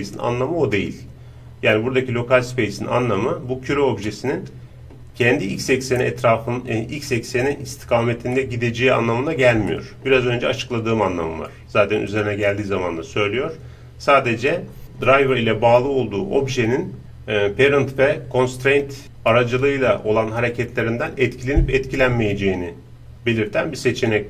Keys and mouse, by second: 4.1-12.0 middle drag, 12.2-18.4 drag.